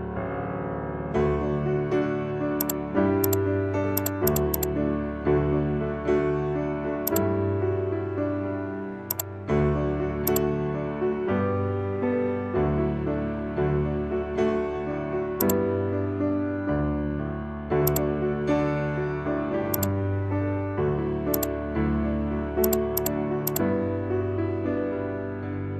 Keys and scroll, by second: 22.6 ctrl+j.